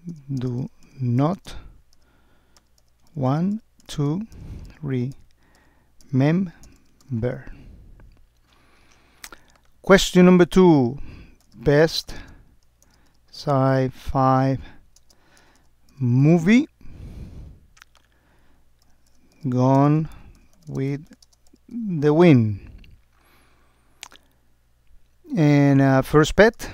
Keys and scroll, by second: 0.5 space, 1.4 space, 3.3 space, 4.0 space, 12.3 space, 15.0 space, 19.8 space, 20.7 space, 21.3 space.